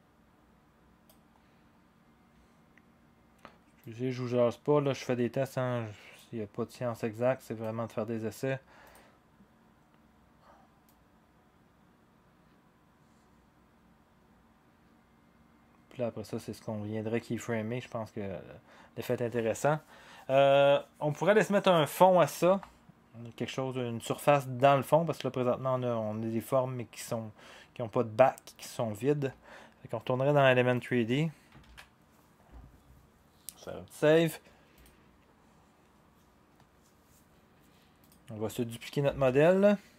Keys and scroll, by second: 31.6 ctrl+s.